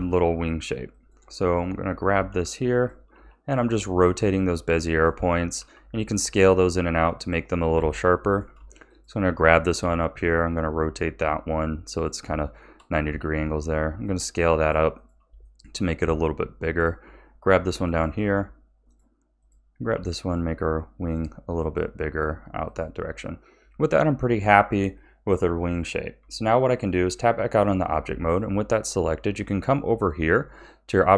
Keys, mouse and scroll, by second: 0.9 click, 2.1 g, 3.1 r, 5.5 s, 7.7 a, 8.2 shift+middle click, 8.9 click, 9.8 r, 12.4 shift+middle click, 13.0 s, 15.4-16.7 shift+middle drag, 16.7 click, 17.6 g, 19.4 click, 19.9 g, 22.6 click, 26.2 Tab.